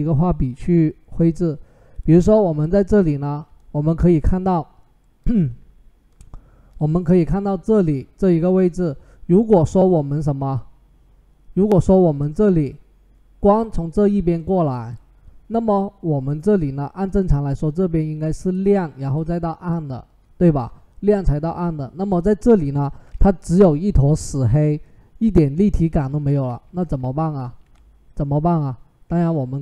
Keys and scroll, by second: 25.9 ctrl+z, 26.3 ctrl+z, 26.8 ctrl+z.